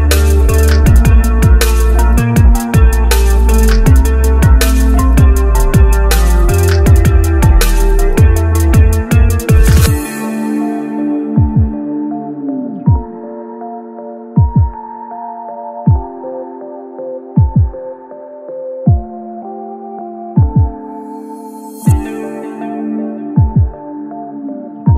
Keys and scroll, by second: 20.0 shift+z.